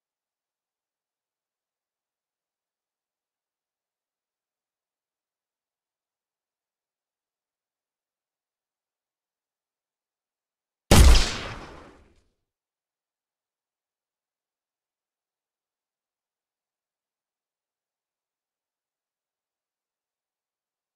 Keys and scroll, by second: 8.0 w.